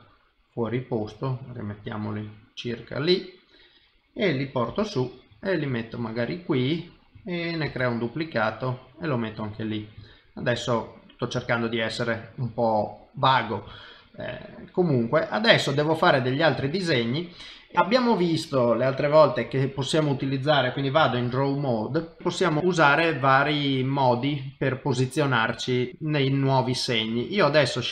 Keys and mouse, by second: 2.4 middle click, 4.7 g, 6.1 middle click, 7.6 shift+d, 8.7 middle click, 10.0 shift+middle click, 10.4 middle click, 11.4 shift+middle click, 12.0 middle click, 13.7 shift+middle click, 14.1 middle click, 16.7 middle click, 21.1 ctrl+Tab, 22.2 middle click, 24.7 middle click, 27.4 click.